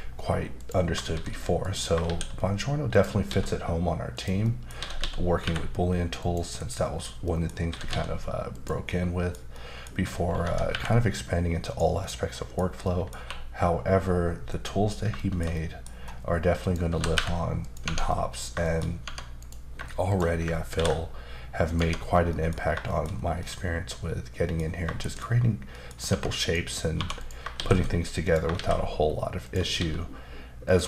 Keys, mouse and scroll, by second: 0.6 click, 1.1 shift+s, 1.6 click, 2.0 shift+a, 2.9 click, 3.2 s, 4.1 click, 4.4 middle click, 5.0-5.4 typing, 6.2 click, 6.6 KP_Decimal, 6.9-7.2 scroll down 2, 7.2 middle click, 7.7 typing, 8.5 click, 8.9 middle click, 9.5 middle click, 10.4 typing, 11.6 click, 12.0 middle click, 12.8 middle click, 13.2 q, 14.5 click, 15.2 shift+middle click, 15.9-16.6 scroll up 1, 16.6 click, 16.9 typing, 17.6 click, 17.8 Tab, 18.1 middle click, 18.6 shift+middle click, 19.0 Tab, 19.4 click, 20.1 shift+click, 20.7 ctrl+b, 21.7 click, 21.8 Tab, 22.1 scroll down 1, 22.6-23.4 scroll down 3, 22.9 shift+middle click, 23.4 middle click, 25.0 shift+middle click, 25.0 ctrl+shift+b, 25.7 middle click, 26.1 Tab, 26.4 click, 26.9 1, 27.2 click, 27.6 shift+s, 28.2 click, 28.5 shift+a, 29.4 click, 29.7 s, 30.7 click.